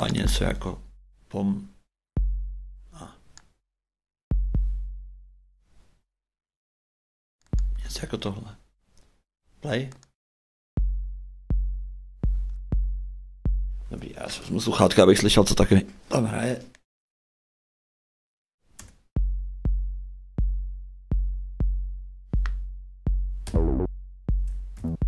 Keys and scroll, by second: 13.8 shift+space, 18.8 shift+space, 23.4 shift+a, 24.7 shift+d.